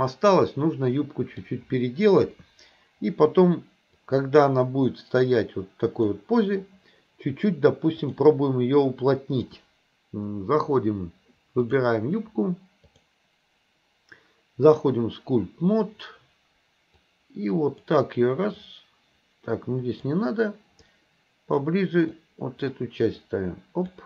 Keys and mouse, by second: 2.3 KP_1, 4.1-6.2 drag, 8.0-8.6 drag, 9.4-10.9 drag, 12.9-14.9 drag, 17.1 click, 18.6-20.1 drag, 20.9 click, 22.2 click, 23.4 click.